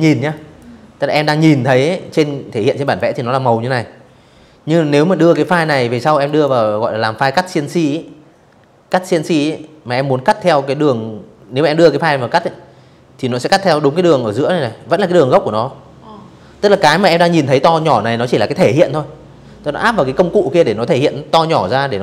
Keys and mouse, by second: 0.5 click, 3.0 space, 3.1 click, 3.4 v, 3.6 click, 3.9 click.